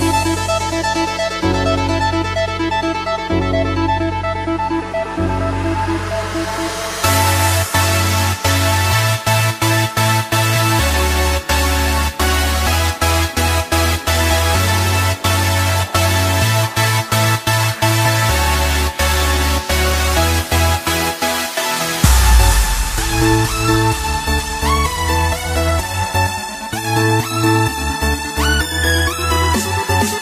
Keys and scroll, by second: 4.6 ctrl+-, 5.0 ctrl+=, 11.0 space, 14.4 space, 16.9 space, 18.5 ctrl+-, 19.1 space, 25.7 b, 29.2 space, 29.4 ctrl+=, 29.8 ctrl+z.